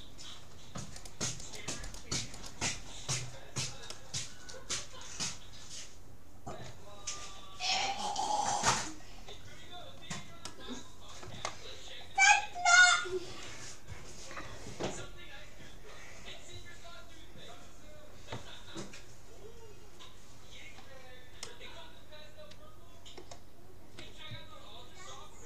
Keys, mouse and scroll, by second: 1.5 shift+e, 3.1-5.7 middle drag, 7.1-8.1 scroll down 1, 8.1-8.7 scroll up 1, 8.7 middle click, 9.5 scroll up 1, 9.6-13.9 middle drag, 21.5-23.1 middle drag, 24.3 shift+c, 24.4 h, 24.5 y, 24.5 p.